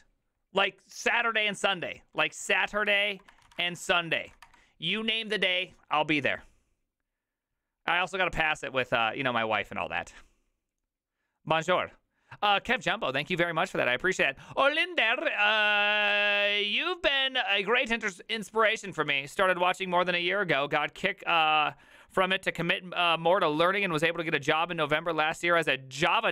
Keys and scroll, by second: 2.7-4.8 typing.